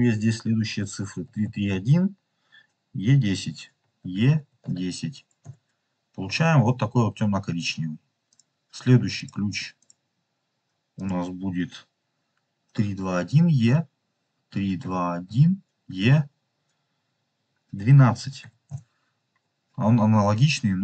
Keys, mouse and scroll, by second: 1.3 KP_3, 8.2 click, 9.1 click, 9.8 click.